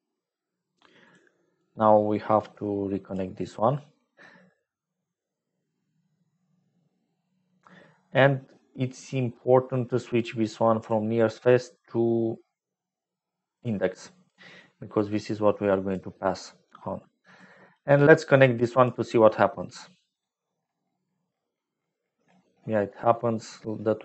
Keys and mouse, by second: 1.0 click, 2.2-3.2 drag, 10.7-13.6 drag, 14.9 click, 16.5 click, 17.3 click, 18.2 click.